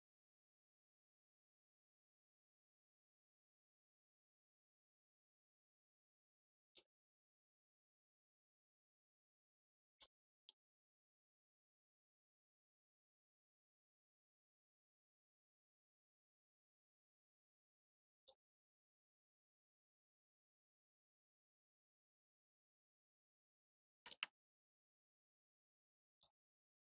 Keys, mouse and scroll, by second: 0.7 click, 2.8 click, 4.6-5.6 scroll up 4, 6.7 middle click, 9.1 click, 10.0 middle click, 12.6 click, 14.9-16.1 middle drag, 18.1 click, 20.8 click, 23.3 middle click, 24.5 middle click, 24.9 scroll down 2, 26.1 click.